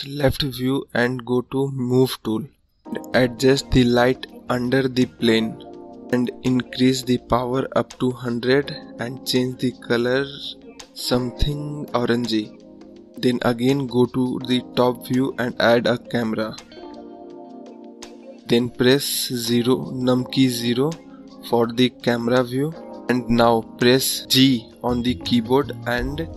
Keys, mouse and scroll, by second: 1.0-2.2 drag, 6.8 KP_0, 9.9 click, 14.1 `, 14.8-15.5 scroll up 4, 15.5-17.3 scroll down 3, 17.3 scroll down 1, 18.5 shift+a, 19.0 `, 19.7 KP_0, 21.0 g.